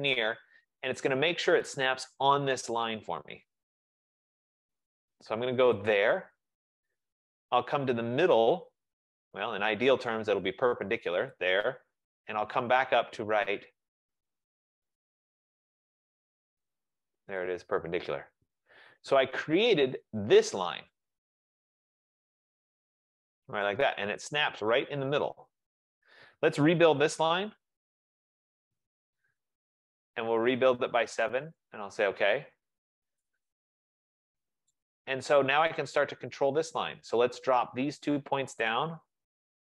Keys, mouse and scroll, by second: 6.0-11.1 drag, 11.5-16.5 drag, 17.5 click, 18.7 Return, 20.2 click, 23.7 right click, 27.9-28.7 typing, 28.4 right click, 31.7-33.7 drag, 33.7 typing, 35.3 middle click, 35.3 middle click, 35.5 middle click, 36.8 click, 39.0 shift+click.